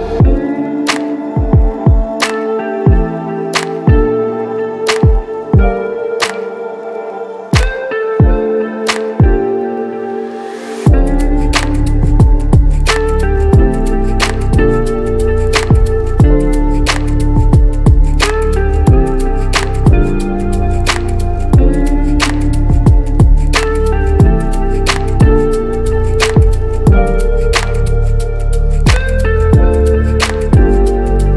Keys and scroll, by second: 5.8 ctrl+i, 6.6 x, 13.4 ], 17.1 ctrl+s, 25.9 space.